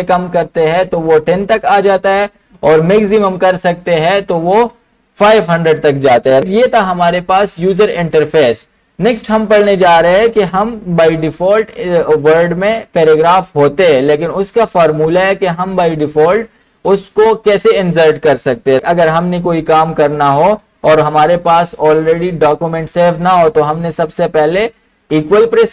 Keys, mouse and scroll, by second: 2.6 click, 25.2-25.7 typing.